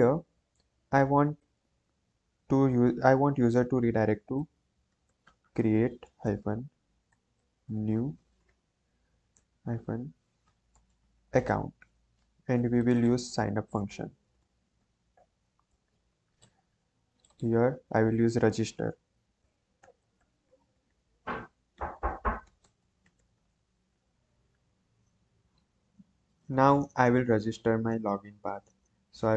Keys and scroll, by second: 4.1-11.9 typing, 13.4-15.1 typing, 15.6 Return, 18.8-23.8 typing, 24.0 ctrl+s.